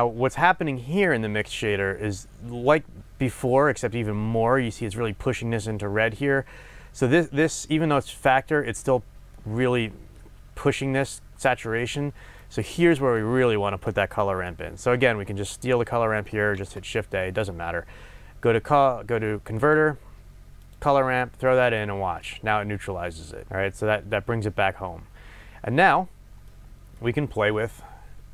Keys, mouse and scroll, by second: 16.7 shift+a, 21.7 click, 26.4-28.3 middle drag.